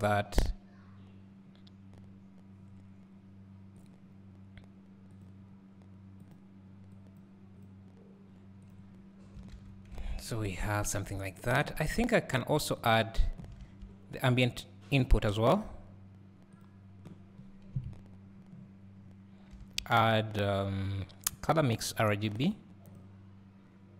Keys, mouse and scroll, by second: 2.0 scroll up 1, 5.2 click, 10.3 scroll up 1, 10.8 scroll down 1, 12.8 click.